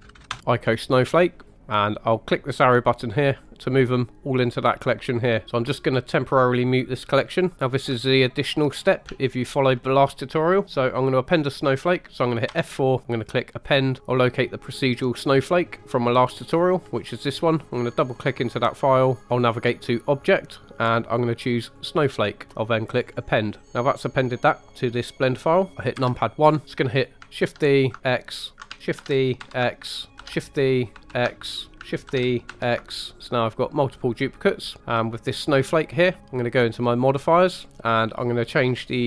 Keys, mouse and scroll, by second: 3.5 typing, 5.4 click, 7.4 click, 7.5 middle click, 8.1 shift+middle click, 8.8 scroll up 2, 9.2 shift+middle click, 12.4 F4, 23.6-24.2 drag, 24.2 middle click, 25.0-25.6 scroll down 1, 25.7 middle click, 25.9 KP_1, 26.4 scroll down 1, 26.6 shift+middle click, 27.4 shift+d, 28.5 ctrl+click, 29.0 shift+d, 29.4 x, 30.2 ctrl+click, 30.2 shift+d, 30.9 x, 31.7 ctrl+click, 32.1 shift+d, 32.5 x, 35.8 click, 37.1 click.